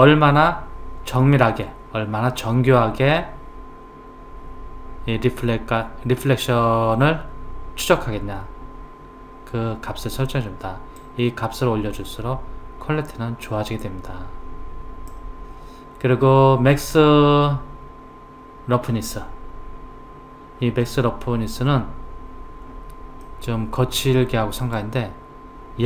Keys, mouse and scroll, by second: 11.0 click, 23.3-24.6 middle drag, 24.6 click.